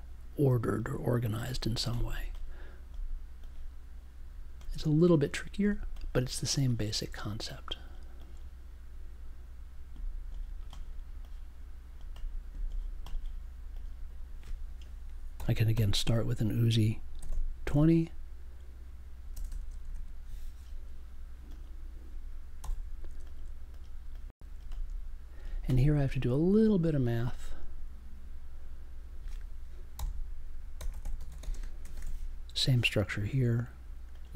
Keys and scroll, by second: 15.3 n, 16.9-18.1 typing, 19.3-20.4 typing, 22.6 b, 29.9-32.5 typing, 33.0 super+j.